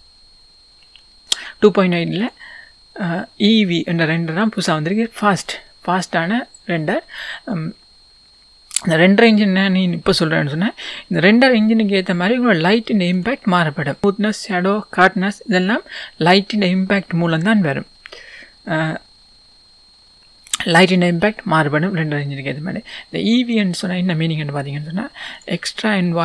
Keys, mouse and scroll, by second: 2.2-6.2 drag, 8.3-9.1 scroll down 2, 9.1-11.7 scroll down 1, 11.7-13.3 drag, 11.7-12.2 scroll up 1, 14.0-17.8 scroll up 1.